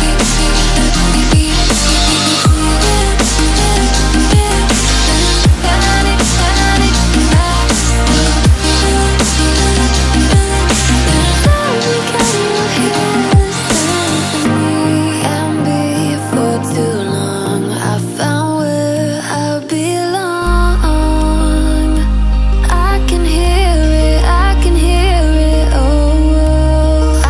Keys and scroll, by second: 24.3 ctrl+a.